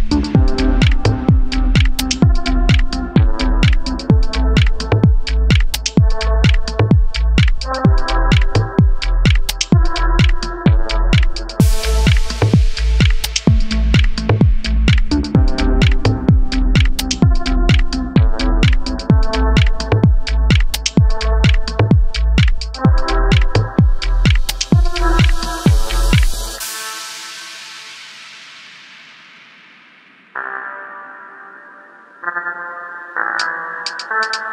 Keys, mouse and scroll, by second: 1.7-2.2 scroll up 1, 2.2 click, 2.7 Tab, 3.0-5.4 middle drag, 3.4 scroll down 1, 4.8 scroll up 1, 5.4 click, 6.2 2, 6.5 click, 7.1 e, 10.3 click, 10.5 scroll down 1, 10.9-12.2 middle drag, 13.1-14.4 middle drag, 15.9 Tab, 15.9 middle click, 16.2 click, 17.3 Tab, 18.4 click, 19.0 3, 19.3 shift+click, 19.6-25.1 middle drag, 20.2 g, 20.9 Escape, 21.1 e, 21.6 Escape, 21.9 e, 24.0 Escape, 24.9 ctrl+z, 25.5 click, 26.5 e, 27.9 click, 28.6-29.8 middle drag, 29.2 ctrl+z, 30.1 click, 31.8 click, 32.0-34.1 middle drag, 32.3 ctrl+z, 34.1 click.